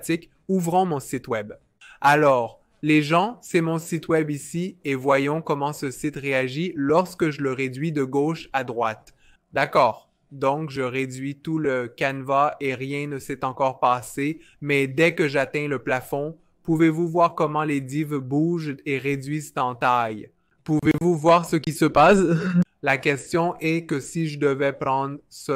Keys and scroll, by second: 0.0 typing.